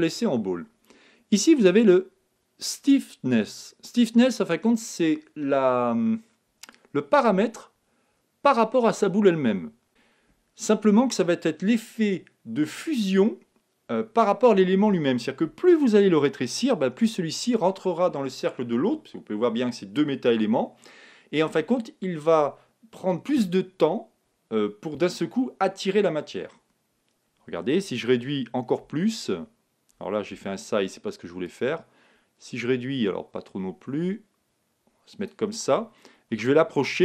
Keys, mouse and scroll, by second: 6.7-8.6 drag, 28.8 s, 31.4-33.2 drag, 36.2 g.